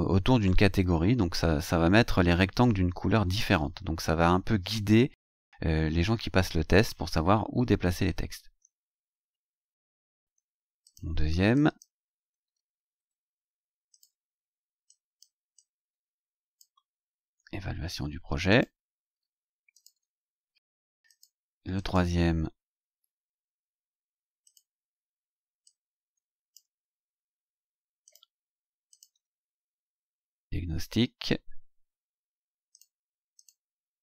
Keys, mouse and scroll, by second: 9.0-9.3 scroll down 2, 9.9 scroll down 2, 10.8 click, 11.5 click, 12.4 scroll down 2, 13.9 click, 14.8 click, 15.5-16.8 drag, 17.1 ctrl+c, 18.5 click, 19.7 ctrl+click, 19.9 ctrl+v, 21.0 click, 21.7 click, 22.3-22.6 scroll down 2, 24.4 click, 25.6 click, 27.1 ctrl+c, 28.0 click, 28.9 ctrl+click, 29.1 ctrl+v, 30.8 scroll down 2, 32.7 click, 33.3 click.